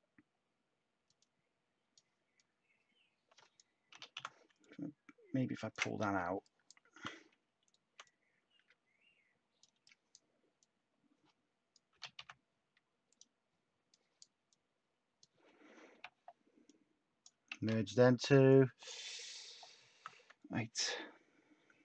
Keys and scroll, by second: 3.6-4.6 typing, 6.9 t, 11.7-12.6 typing, 15.6-16.4 typing, 17.5 ctrl+w, 19.8 t.